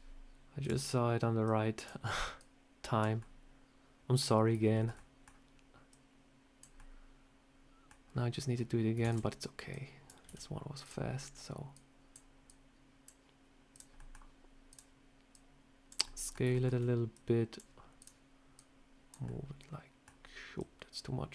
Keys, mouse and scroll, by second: 0.5 click, 1.3 click, 2.3 click, 3.1 middle click, 4.3 scroll up 3, 4.6 shift+middle click, 4.8 middle click, 5.8 click, 6.6 middle click, 7.8 scroll down 2, 8.9 shift+d, 9.6 click, 10.1 s, 11.1 scroll up 2, 11.6 click, 12.4 click, 13.6 click, 13.9 middle click, 14.6 click, 15.2 click, 15.9 middle click, 16.4 shift+middle click, 17.0 click, 17.9 click, 18.4 click, 19.1 middle click, 20.5 click.